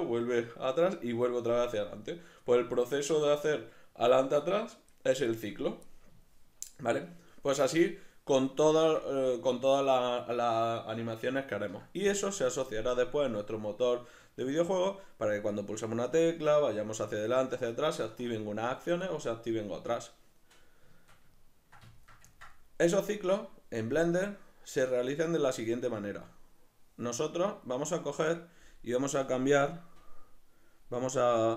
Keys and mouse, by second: 6.2 shift+middle click, 6.9-25.7 middle drag, 25.7 right click, 30.0-31.5 drag.